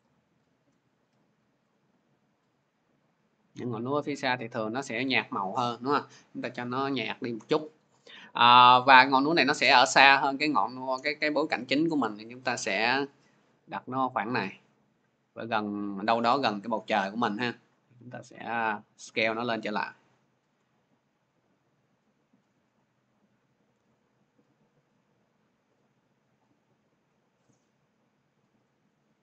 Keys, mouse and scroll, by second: 3.2 click, 4.9-14.2 drag, 15.3-18.1 drag, 20.3 shift+click, 22.3-23.5 drag, 25.7-28.7 shift+drag.